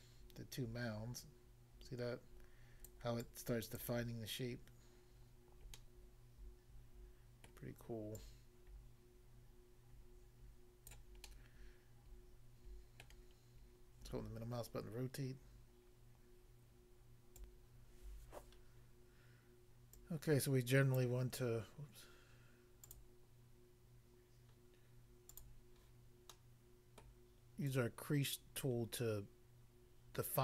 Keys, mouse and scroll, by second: 2.9 click, 3.2 click, 3.8 click, 5.8 middle click, 7.5 middle click, 8.2 click, 11.0 click, 11.3 middle click, 13.0 middle click, 17.3 click, 17.5 click, 20.0 click, 20.9 click, 22.9 click, 25.3 click, 25.4 click, 26.3 middle click, 27.0 middle click, 27.7 click.